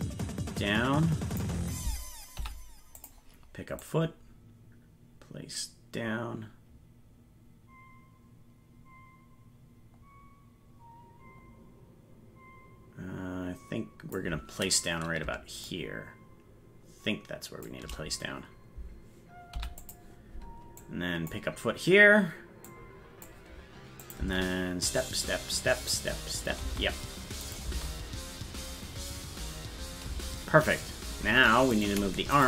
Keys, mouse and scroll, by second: 2.4 i, 3.9-14.2 drag, 15.7-17.7 shift+drag, 19.6 i, 20.8 click, 22.7 click, 24.1 click, 27.5 click, 27.5 space, 27.7 space, 31.9 right click.